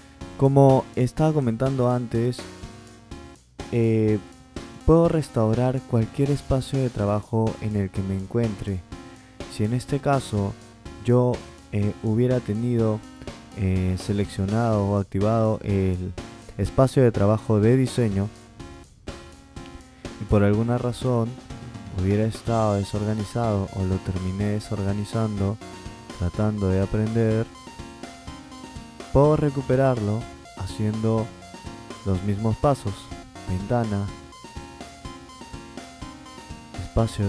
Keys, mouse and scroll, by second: 4.5 click, 18.3 click, 21.1-21.7 drag, 23.0 click, 24.8-25.6 drag, 27.5 click, 32.9 click.